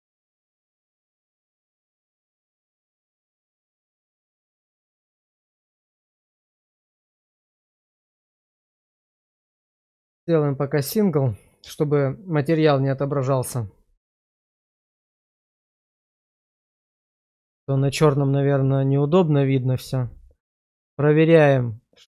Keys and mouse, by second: 17.4 /, 19.8-20.6 middle drag, 21.3-22.1 middle drag.